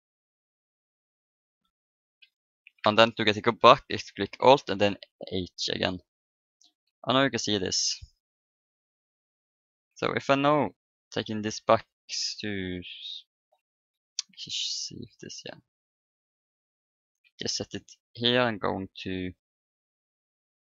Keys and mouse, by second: 0.4-2.2 drag, 4.6 alt+h, 5.2 a, 6.4 middle click, 6.6 Tab, 10.3 right click, 11.9-13.0 drag, 11.9 right click, 13.0-15.0 middle drag, 13.9 KP_7, 15.4-17.1 drag, 17.2 KP_1, 18.9 ctrl+KP_1, 20.0 KP_3, 20.6 ctrl+KP_3.